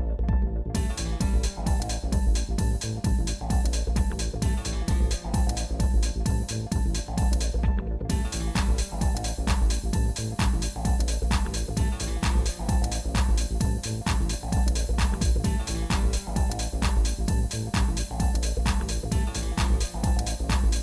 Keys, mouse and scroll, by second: 13.5 scroll down 2, 14.9 scroll down 3, 15.3 scroll up 1, 15.3 scroll down 1, 15.9 scroll up 1, 17.9-18.9 shift+middle drag, 19.3 shift+middle click.